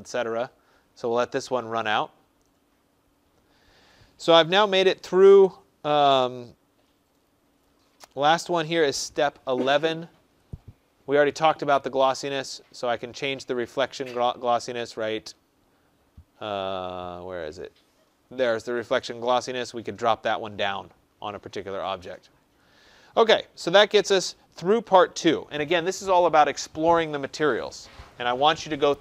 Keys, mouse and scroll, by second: 10.4 click, 13.8 scroll.